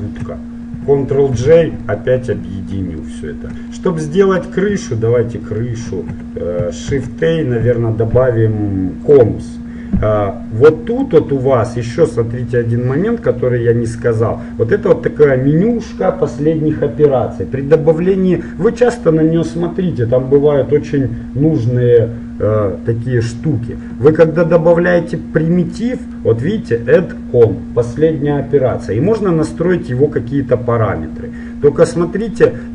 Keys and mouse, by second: 1.4 ctrl+j, 4.7-6.0 middle drag, 6.0 shift+c, 7.0 shift+a, 11.1-13.1 drag, 11.7-12.9 middle drag, 13.1-14.9 middle drag, 24.3-26.1 middle drag, 30.1-31.7 drag.